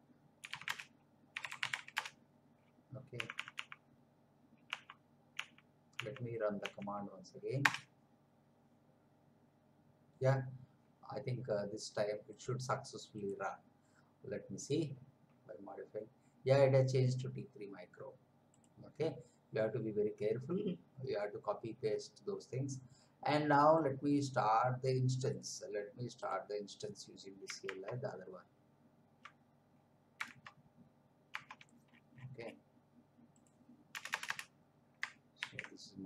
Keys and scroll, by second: 0.2-2.2 typing, 3.1 Up, 7.6 Return, 27.8 alt+Tab, 30.4 alt+Tab, 33.9 Return, 35.4 ctrl+v.